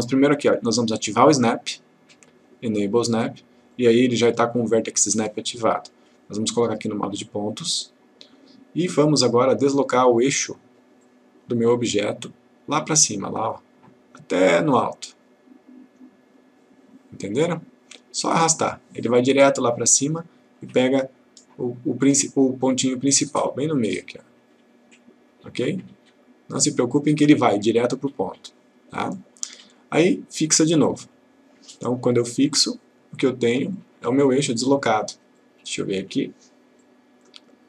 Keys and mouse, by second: 1.2-2.7 drag, 11.1 click, 13.0-17.1 drag, 30.4 click, 32.5 click.